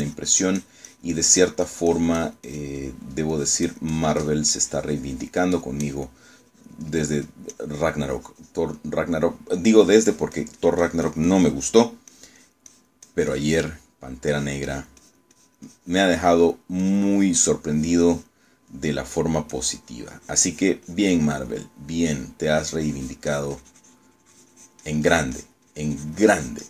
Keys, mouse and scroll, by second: 3.9 middle click, 4.4-5.6 drag, 8.0 click, 8.6-9.8 drag, 9.9 middle click, 10.8-13.0 drag, 13.2-15.2 drag, 15.4-17.8 drag, 17.9-19.6 drag, 19.8 middle click, 20.6-22.8 drag, 22.8 middle click, 23.6-26.6 drag.